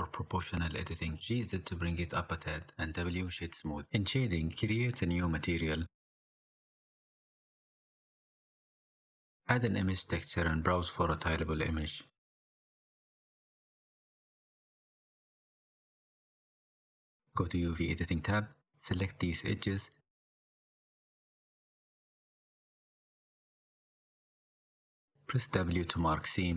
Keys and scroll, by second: 0.0-0.8 typing, 0.8 Escape, 2.9 Tab, 3.4 Tab, 17.1 n, 26.0 w.